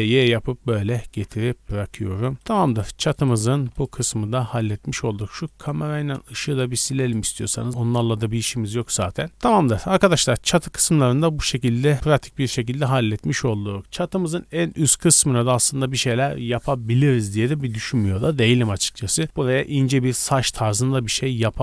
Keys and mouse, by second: 1.3 a, 1.5 a, 2.6 click, 2.8-3.1 middle drag, 3.1 click, 3.2-5.4 middle drag, 3.6 x, 5.4 click, 5.6 middle click, 6.4 shift+click, 6.6-8.7 shift+middle drag, 6.8 x, 8.8 middle click, 9.7-21.5 middle drag.